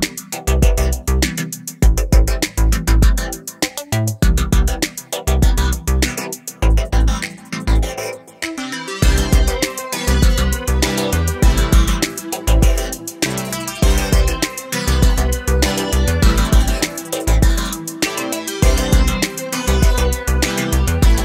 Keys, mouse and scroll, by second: 0.2 KP_7, 0.5-1.8 scroll up 1, 3.3 alt+z, 3.7 1, 3.9 click, 4.6 s, 5.7-6.8 drag, 6.8 x, 7.6 s, 8.5 click, 10.4 middle click, 10.7-11.3 scroll up 2, 11.3 a, 11.5 a, 11.8 s, 12.5 scroll down 2, 12.6 middle click, 12.9 alt+space, 13.2 alt+z, 13.3-13.7 scroll up 1, 13.7 s, 14.8 click, 15.0-16.2 middle drag, 16.2 ctrl+r, 17.0 middle click, 17.1 scroll up 2, 17.3 2, 17.5 click, 18.5 scroll down 2, 18.5-19.5 middle drag, 19.5 scroll up 1, 19.7 middle click, 20.3 click.